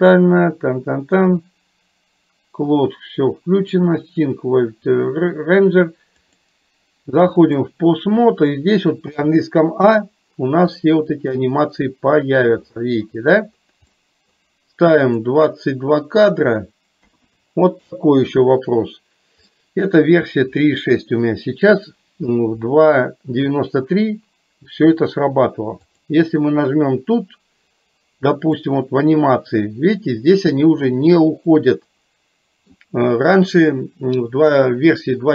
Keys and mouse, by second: 6.4-7.9 drag, 11.0 middle click, 14.0 middle click, 15.2 click, 16.5-18.0 drag, 19.6 middle click, 25.9-28.1 drag, 28.7-30.9 middle drag, 31.6-32.7 middle drag.